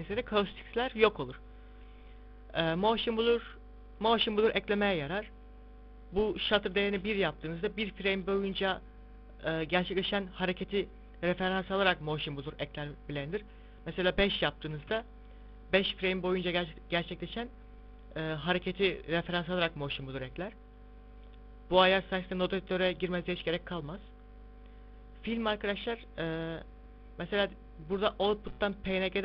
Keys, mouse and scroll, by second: 1.7 click, 3.2 click, 5.2 click, 5.4 click, 6.2 click, 13.7 click, 14.0 click, 20.9 click, 21.6 click, 23.2 click, 24.0 click, 27.8 click, 28.8 click.